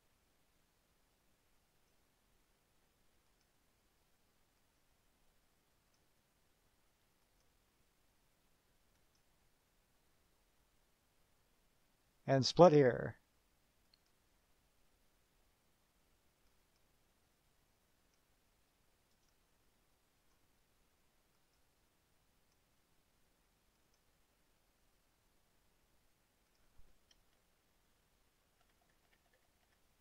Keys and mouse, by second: 1.9 click, 3.5 click, 4.8 click, 6.0 click, 7.5 click, 9.2 click, 14.1 click, 16.8 click, 18.2 click, 19.2 click, 19.5 middle click, 20.4 click, 21.5 click, 22.5 click, 24.0 click, 26.7 click, 27.5 KP_Subtract.